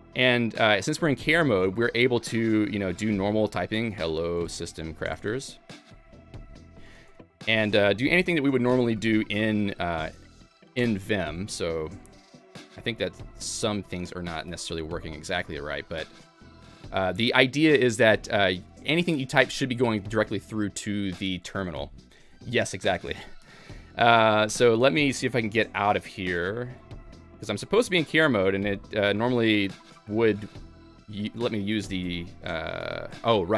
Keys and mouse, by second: 1.6 v, 3.9-16.4 typing, 7.5 Escape, 8.8 Escape, 10.9 Escape, 12.5 Escape, 13.4 Escape, 14.8 Escape, 15.5 Escape, 16.7 Escape, 24.2 shift+;, 24.4 shift+;, 25.4 Escape, 26.2 ctrl+c, 26.9 Escape, 28.0 ctrl+k, 29.6 i, 30.0 i, 30.2 i, 30.6 BackSpace, 31.1 Escape, 32.8 ctrl+g, 33.0 ctrl+g.